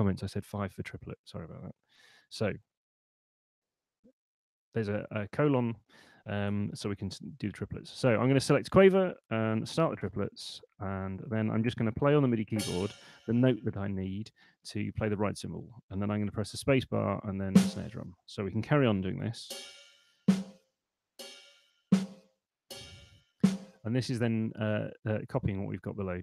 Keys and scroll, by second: 6.7 Escape, 8.0 5, 9.4-10.3 typing, 16.7 space, 19.9 space.